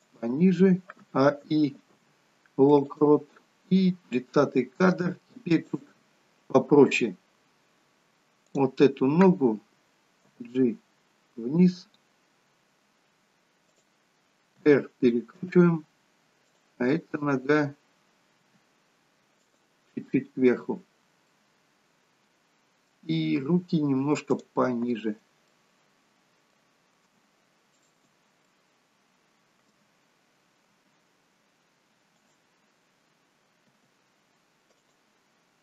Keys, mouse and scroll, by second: 1.6 a, 2.1 i, 4.4 click, 8.5 click, 10.3 g, 14.8 r, 16.7 click, 18.6 g, 21.4 middle click, 24.4 click, 25.6 middle click, 27.8 shift+click, 28.6 middle click, 31.0 g, 33.9 r.